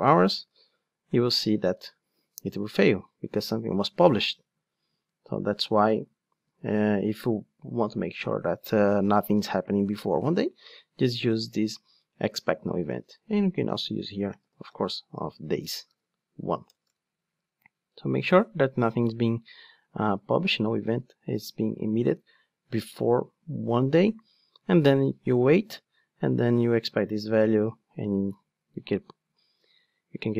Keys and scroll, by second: 0.3 ctrl+shift+d, 13.3 alt+BackSpace, 15.4 alt+BackSpace, 15.6 Return.